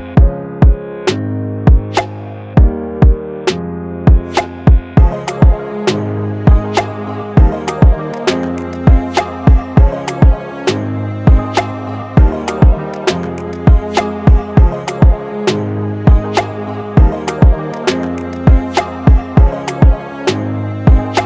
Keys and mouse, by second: 4.3 space, 5.9-11.7 middle drag, 11.7-12.3 drag, 13.3-14.8 middle drag, 15.4-21.2 middle drag.